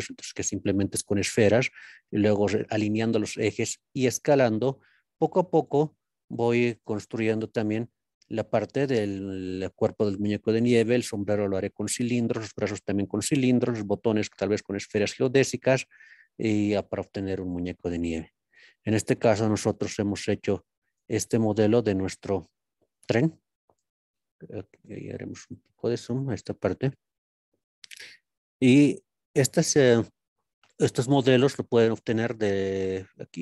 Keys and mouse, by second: 1.9 z, 3.0 click, 3.7 s, 5.6 x, 6.7 z, 7.5 click, 9.1 click, 18.1 click, 19.4 KP_Decimal, 20.9-21.7 drag, 22.3 KP_Decimal, 23.1 click, 24.8-25.8 drag, 26.8-27.6 shift+middle drag, 28.5-29.9 middle drag.